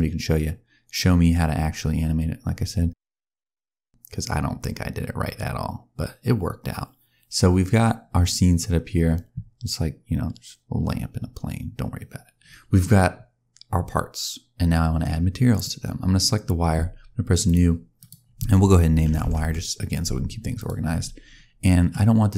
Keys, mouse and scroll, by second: 15.4 click, 17.3 click, 20.4 click, 20.8-21.3 scroll up 6, 21.3 scroll down 1, 21.5 middle click, 22.2 click.